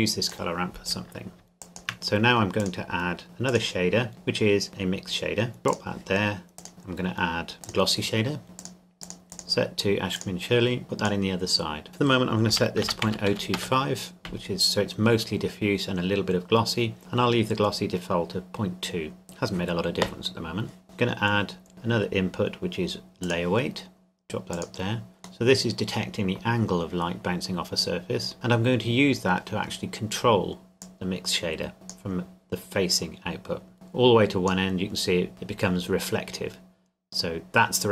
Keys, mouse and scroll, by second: 0.9-1.4 scroll down 1, 1.6 shift+click, 1.9 click, 5.6 click, 7.6 click, 12.5 KP_Decimal, 12.8 KP_0, 13.0 KP_2, 13.3 KP_5, 13.5 KP_Enter, 20.8 click, 23.2 click, 25.5 middle click, 30.8 click.